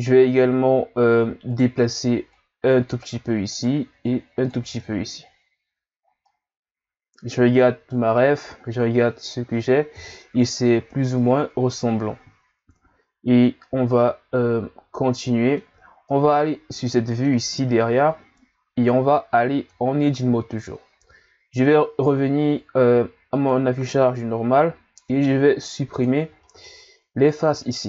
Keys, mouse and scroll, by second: 1.5 right click, 2.3 click, 3.5 right click, 4.1 click, 4.7 Tab, 6.2-9.3 middle drag, 10.0 KP_1, 12.3-12.9 scroll down 1, 13.6-19.3 middle drag, 19.6 Tab, 23.4 click, 25.1 ctrl+Tab, 26.4-27.6 middle drag, 27.6 right click.